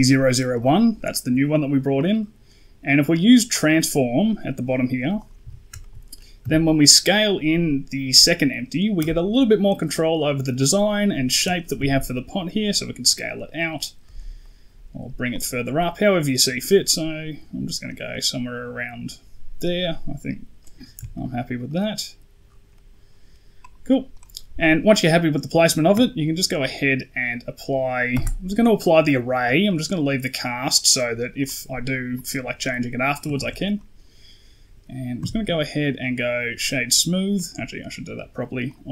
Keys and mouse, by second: 3.4 click, 5.0 right click, 5.3 KP_1, 5.7 shift+middle drag, 6.3 s, 9.5-11.4 drag, 13.9 s, 14.3-14.6 middle drag, 15.2-17.7 drag, 18.0-19.3 middle drag, 19.8 middle drag, 20.5 middle drag, 21.0 shift+middle drag, 21.5-21.8 middle drag, 22.6 middle drag, 24.0 right click, 24.5 middle drag, 28.0 ctrl+a, 31.3 right click, 32.0 click, 33.2 ctrl+z, 33.6 right click, 35.1 q, 38.6-38.9 drag.